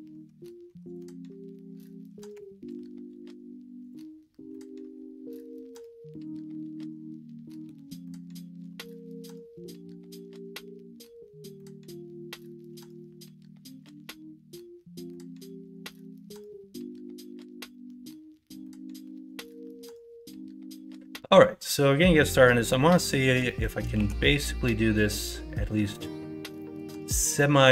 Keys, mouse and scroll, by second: 0.6 Tab, 2.3 g, 4.5-5.9 middle drag, 5.9 scroll up 1, 6.2-8.2 middle drag, 8.5 KP_1, 8.9 KP_3, 13.0-13.8 scroll up 1, 13.8 shift+middle click, 15.4 shift+middle click, 16.0-17.3 middle drag, 17.7-19.0 middle drag, 19.0 scroll up 1, 19.6 middle click, 21.4 scroll up 1, 21.6-22.5 scroll down 1, 22.5 scroll up 1, 22.9 middle click, 23.1 scroll down 1, 23.4 scroll up 1, 23.6 middle click, 23.9 shift+a, 26.5 middle click.